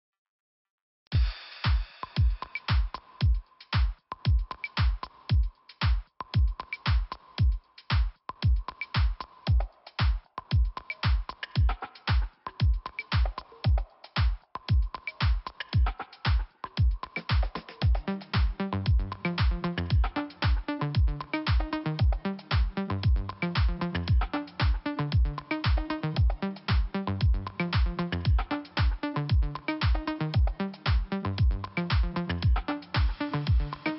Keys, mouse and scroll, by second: 3.1 click, 3.8 click, 3.9 click, 4.3 click, 4.5 click, 4.7 click, 5.0 scroll up 2, 8.1 click, 9.5 scroll down 1, 10.6 click, 11.8 scroll down 1, 12.4 scroll up 1, 13.7 middle click, 14.3 scroll down 1, 15.3 middle click, 15.5 middle click, 18.2 click, 18.3 click, 18.8 click, 18.9 click, 19.8 click, 20.1 click, 20.2 double click, 20.3 double click, 20.4 double click, 22.7 middle click, 24.0 click, 26.5 click, 26.7 click, 28.0 click, 30.5 click, 30.6 click, 31.7 click, 32.6 click.